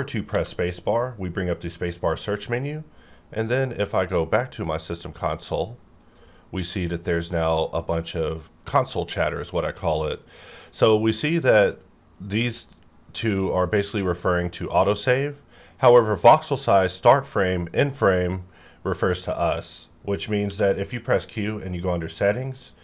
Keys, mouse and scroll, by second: 0.3 space, 2.1 click, 19.6 click, 19.7 click, 20.4 q.